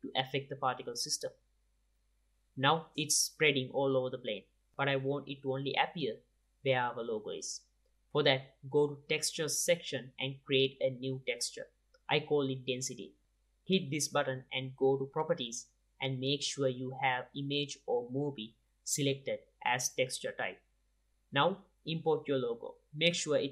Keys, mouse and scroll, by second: 1.3-2.2 middle drag, 3.3-5.4 drag, 5.4-6.3 middle drag, 7.7-8.9 drag, 15.1-16.4 drag, 18.5-20.5 drag, 20.9 click.